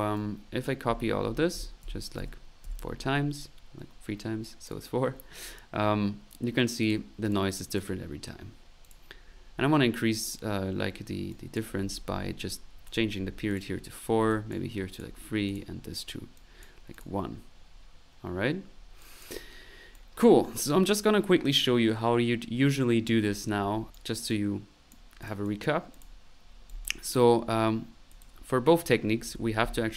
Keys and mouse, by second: 0.0-2.6 typing, 0.0 click, 0.3 click, 0.7 right click, 3.3 ctrl+click, 3.8 middle click, 4.4 click, 6.8-8.2 drag, 8.8 click, 11.3 click, 13.5 click, 14.3 click, 15.5 click, 16.3 click, 17.0 click, 18.7 middle click, 19.0 click, 19.9-21.0 drag, 23.9 click, 23.9 right click, 24.3 click, 25.2-26.2 drag, 26.4 click, 26.7 click, 27.4 middle click, 28.2 middle click, 28.9-29.7 typing.